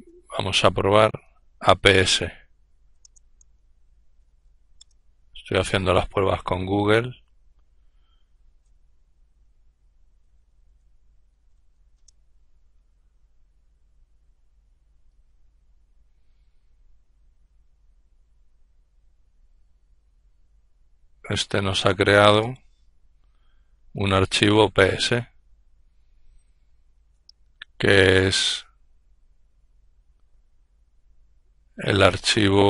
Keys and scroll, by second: 0.0-4.5 typing, 4.1 Return, 9.0-11.1 typing, 13.0 typing.